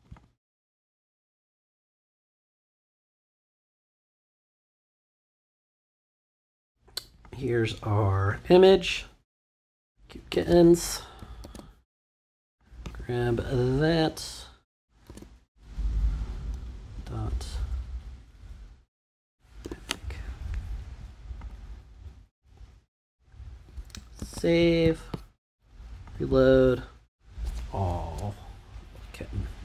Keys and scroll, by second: 10.3 Return, 11.2 super+Return, 11.4 super+c, 15.0 super+v, 16.9 •, 18.8-20.1 typing, 24.2 super+s.